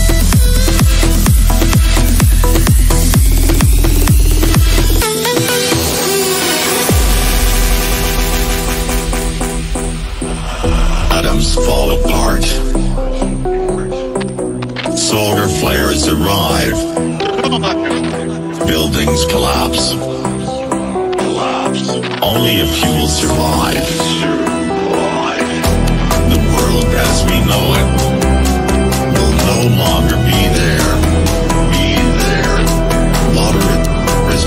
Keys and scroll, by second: 11.2 c, 25.7 Delete.